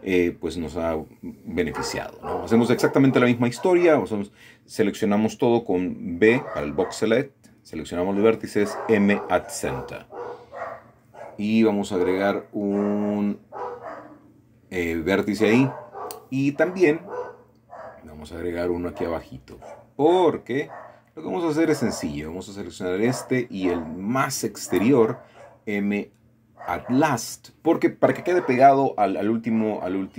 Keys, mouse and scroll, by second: 0.9 click, 2.5-3.1 scroll down 6, 3.7 scroll down 4, 4.1 middle click, 6.5-8.4 middle drag, 13.0 click, 14.8-15.9 drag, 18.1 click, 19.4 click, 20.0-21.2 scroll up 1, 21.2 click, 22.2-23.6 middle drag, 23.9 shift+click, 24.9 m, 27.3 click, 28.8 click.